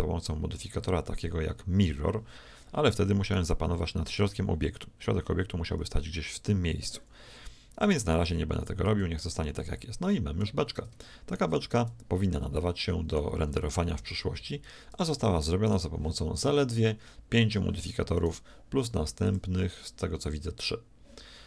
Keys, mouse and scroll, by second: 3.2-5.0 right drag, 8.3 z, 8.9 z, 9.2 middle click, 12.1-13.7 middle drag, 13.4 a, 14.0 z, 14.4 z, 15.6-17.6 right drag, 18.2-19.9 right drag, 19.2-21.1 drag.